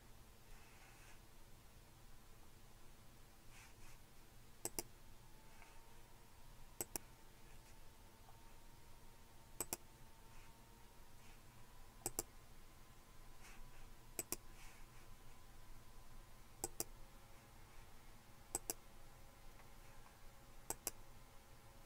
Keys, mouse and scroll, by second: 4.6 click, 6.8 click, 7.0-8.0 scroll up 2, 8.0-9.2 scroll up 1, 9.8 click, 12.1 click, 14.2 click, 16.7 click, 18.5 click, 20.7-21.8 drag.